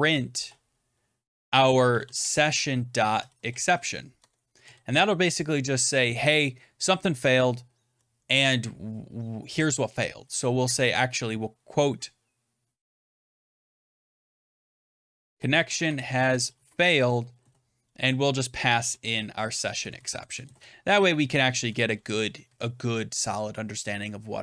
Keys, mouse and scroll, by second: 0.0-3.7 typing, 4.1 Tab, 4.5 Right, 6.7-7.8 Left, 8.1 Right, 10.5 typing, 12.4-19.4 typing, 19.5 Left, 19.7 Left, 19.8 Left, 20.0 Left, 20.2 Right, 20.5-21.6 Right, 21.8 Right, 21.9 Right, 22.1 Right, 22.2 Right, 22.4 Right.